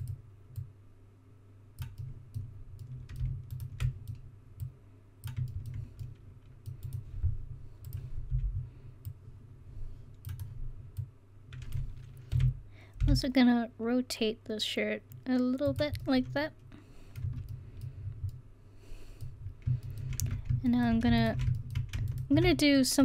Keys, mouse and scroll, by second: 0.6-1.8 drag, 2.0 middle click, 4.6-6.1 drag, 4.6 right click, 9.2 c, 12.3 r, 15.6 click, 17.3 Tab, 20.2 Tab.